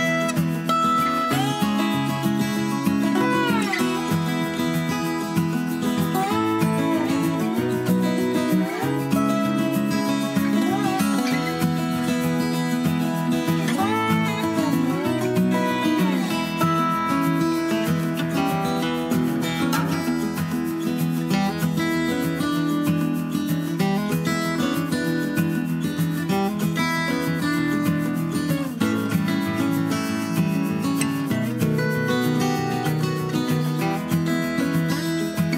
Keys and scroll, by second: 1.8 super+z, 4.3 d, 4.8 d, 18.5 super+d, 20.0 super+d, 20.2 super+d, 30.8 d.